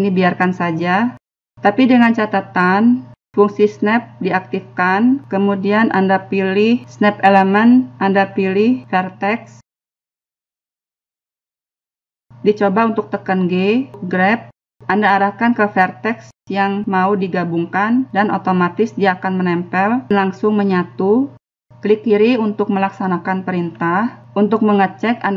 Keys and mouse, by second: 7.5 click, 8.7-9.7 drag, 15.4 g, 24.3 g.